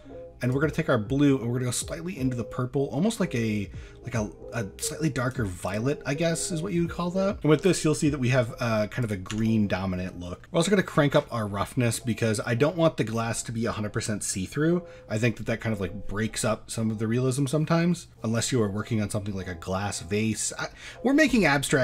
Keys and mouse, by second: 5.7 click, 9.0 click, 9.3 Tab, 11.9 middle drag, 12.6 shift+middle drag.